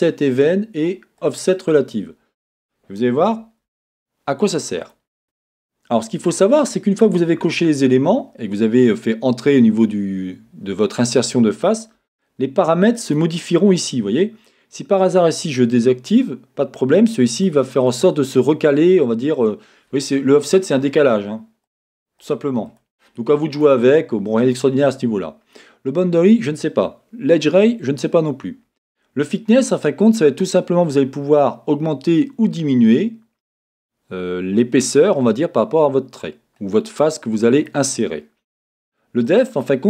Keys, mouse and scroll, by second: 4.9 click, 13.0-14.5 drag, 21.7 click, 22.2-39.8 drag.